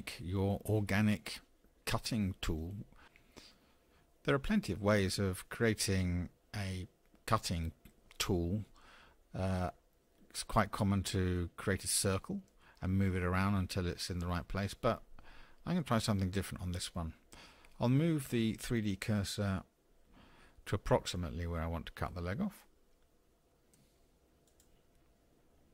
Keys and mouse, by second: 24.5 shift+click.